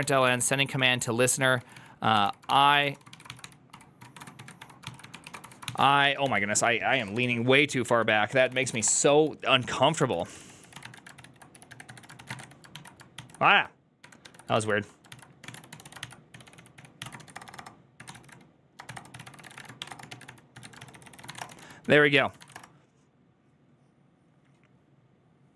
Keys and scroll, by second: 0.0-12.8 typing, 13.0 ctrl+c, 14.4 ctrl+o, 15.0 ctrl+c, 15.1-22.8 typing.